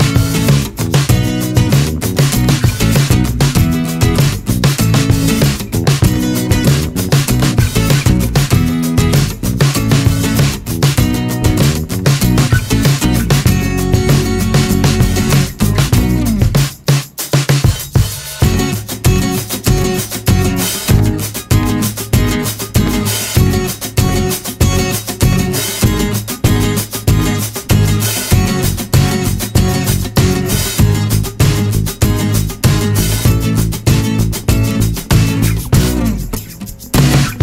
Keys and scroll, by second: 2.9 3, 8.0 ctrl+c, 8.5 space, 9.5 space, 10.1 4, 15.9 ctrl+c, 22.1 space, 24.7 r, 26.9 w, 35.2 3.